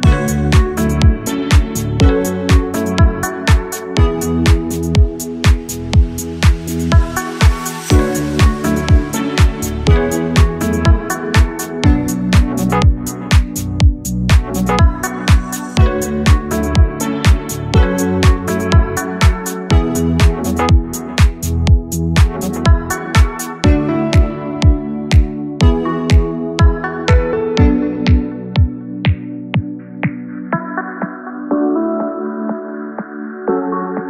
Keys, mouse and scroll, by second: 0.0 click, 1.9-3.2 drag, 3.9 click, 9.4 click, 10.4 s, 11.8 click, 13.0 g, 15.6 click, 18.9-20.9 drag, 24.7 click, 26.8 click, 30.6 click, 31.3 click, 32.5 click.